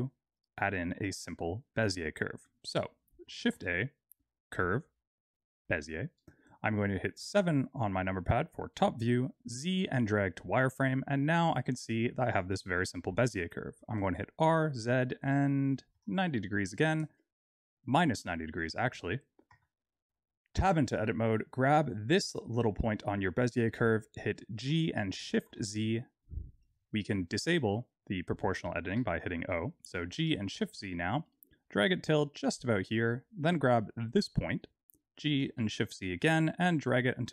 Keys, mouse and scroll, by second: 0.2 click, 0.7 middle click, 1.4 click, 3.4 shift+a, 7.1 KP_7, 8.3-8.9 scroll down 2, 8.9 z, 10.5-11.2 scroll up 2, 11.2 scroll down 1, 14.0 r, 20.5 Tab, 21.4 click, 23.2-24.1 scroll down 4, 24.1-24.5 scroll up 2, 24.6 g, 28.8 o, 30.0 g, 33.9 click, 35.1 g.